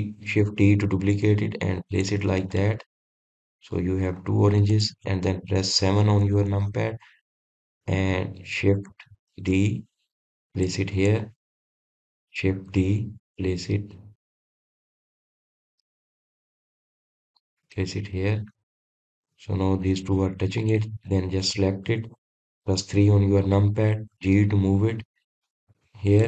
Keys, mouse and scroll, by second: 0.5 shift+d, 4.1-5.7 middle drag, 5.7-6.3 scroll up 1, 6.3 click, 7.4 KP_7, 8.2-8.7 scroll down 1, 8.7-9.3 scroll up 4, 9.3 drag, 10.9 shift+d, 12.6 drag, 13.2 click, 14.2 shift+d, 19.6 click, 20.1-20.9 middle drag, 20.9-21.4 scroll down 4, 21.4-22.3 middle drag, 22.3 drag, 24.4 KP_3, 25.7 g.